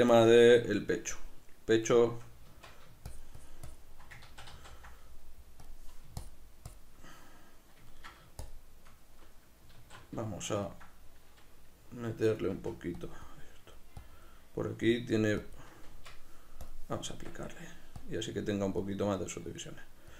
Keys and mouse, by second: 2.5 Tab, 3.1 shift+click, 4.3 ctrl+z, 5.7 click, 7.0-9.9 middle drag, 8.4 shift+click, 9.8 q, 10.7 ctrl+middle click, 13.1 click, 15.9 b, 16.1 Tab, 16.1-17.3 drag, 17.1 Tab, 17.3 b, 18.0 click.